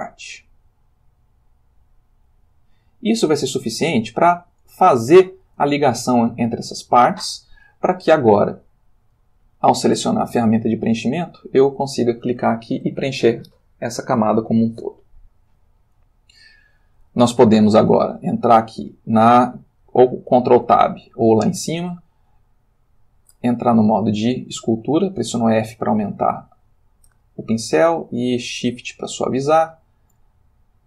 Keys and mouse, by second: 0.4-3.5 drag, 4.9 ctrl+middle click, 5.9-7.3 ctrl+shift+middle drag, 9.8 click, 11.3 click, 12.5 ctrl+middle click, 15.8-17.0 ctrl+middle drag, 17.4 shift+middle click, 20.7 ctrl+Tab, 23.0 click, 24.0 f, 25.5 click, 27.9-28.9 shift+drag, 29.6-30.1 shift+drag, 30.4-30.8 shift+drag.